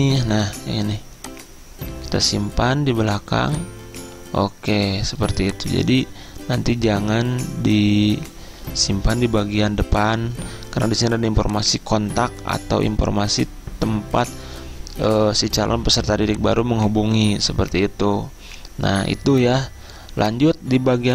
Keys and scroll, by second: 8.8 Return.